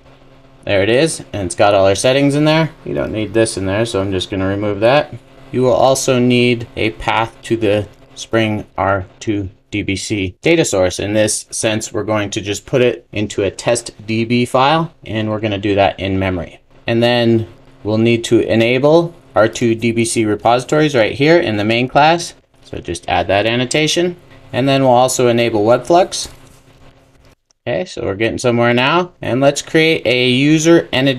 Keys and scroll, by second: 5.3 super+s, 9.1 super+v, 9.2 super+s, 22.5 Return, 22.8 super+s, 27.3 super+s.